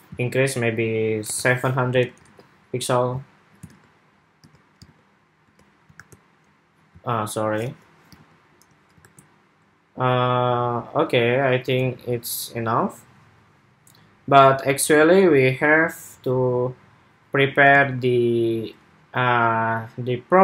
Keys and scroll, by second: 1.7 super+s, 2.0 super+Tab, 3.5 super+Tab, 4.2 super+Tab, 4.6 super+Tab, 5.2 super+Tab, 5.7 super+r, 7.9 super+Tab, 8.7 super+r, 17.5 super+Tab.